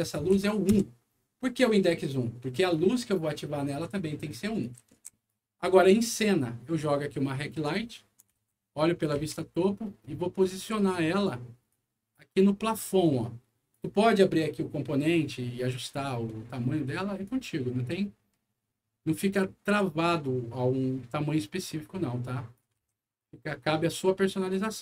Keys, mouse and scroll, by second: 0.3 End, 0.7 Return, 4.6 right click, 4.7-5.5 typing, 6.2-7.5 drag, 8.3 alt+w, 8.9 alt+middle click, 9.1 alt+w, 9.7-10.5 alt+scroll up 5, 11.0 right click, 13.0 click, 15.2-16.0 scroll up 3, 15.6 middle click, 16.1 middle click, 17.2-22.5 drag, 22.8 alt+w, 23.1 alt+right click.